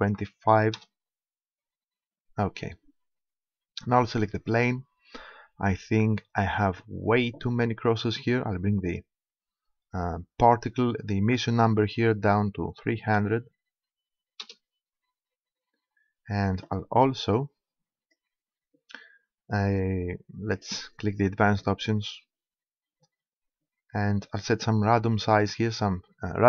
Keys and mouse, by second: 2.0-3.8 middle drag, 4.5-6.4 right drag, 8.1 middle click, 8.9-10.6 drag, 11.6-13.3 drag, 17.4-19.1 drag, 20.4-21.6 middle drag, 21.6-23.2 drag, 25.2-26.4 drag.